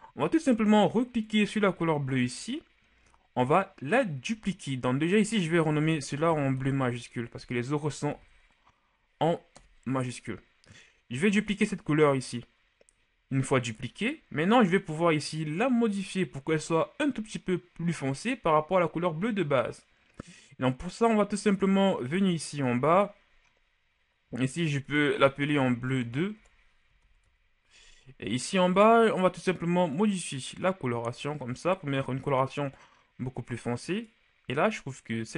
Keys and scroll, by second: 5.9 Caps_Lock, 6.3 b, 6.6 l, 8.1 u, 9.5 Return, 25.6 BackSpace, 26.0 BackSpace, 26.4 BackSpace.